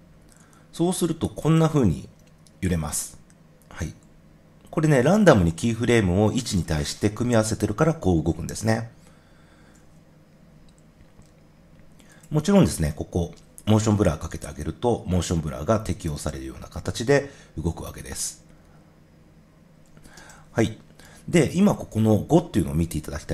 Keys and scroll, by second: 9.6 0, 13.9 0, 20.1 0.